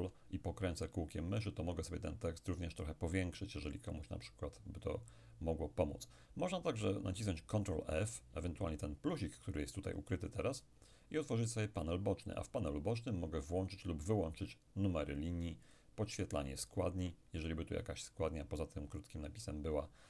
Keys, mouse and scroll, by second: 0.6-1.7 ctrl+scroll up 2, 1.7-2.6 ctrl+scroll up 1, 2.6-3.4 ctrl+scroll up 1, 3.4-3.9 ctrl+scroll up 1, 3.9-4.7 ctrl+scroll down 2, 4.7 ctrl+scroll up 2, 4.9-5.9 ctrl+scroll down 2, 5.9-6.9 ctrl+scroll down 1, 10.6 click, 13.7-17.3 drag.